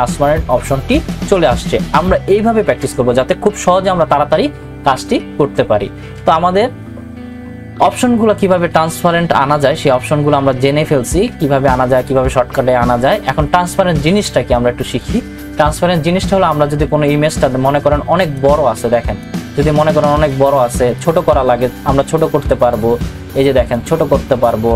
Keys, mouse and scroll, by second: 18.3 ctrl+t, 18.4-24.7 drag.